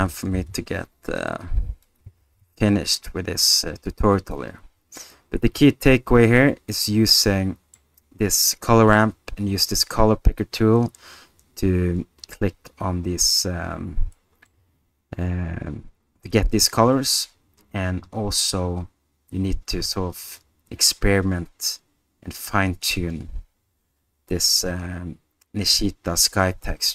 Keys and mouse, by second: 0.0 r, 0.3 z, 4.2 alt+click, 5.7-7.7 middle drag, 14.1-14.5 middle drag, 20.4-22.8 drag.